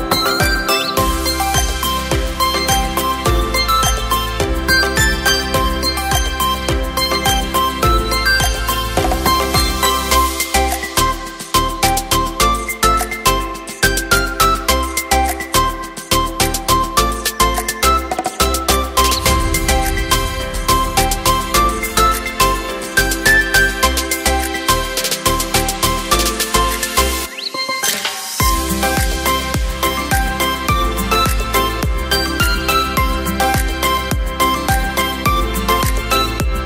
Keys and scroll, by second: 0.8 ctrl+j, 6.9 space, 23.9 Return.